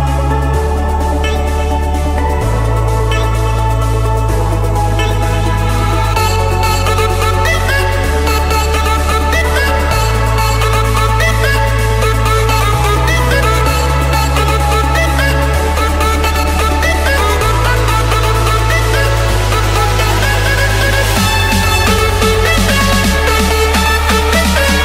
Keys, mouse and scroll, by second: 0.1 Return, 0.9 scroll, 2.9 click, 5.1 click, 7.0 click, 9.4 click, 10.4 click, 11.3 click, 12.3 click, 13.1 click, 13.7 click, 14.1 Escape, 14.9 click, 16.0 click, 16.2 click, 18.0 typing, 18.3 Return, 20.9 click, 22.5-22.9 typing, 23.3 Return, 24.0 Escape.